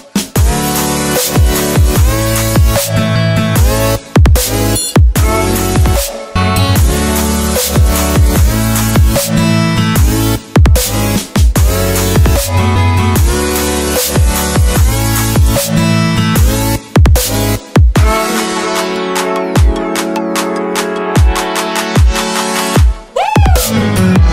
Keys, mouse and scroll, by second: 4.3 Delete, 5.3 click, 7.9 ctrl+s, 13.9 click, 21.5 click.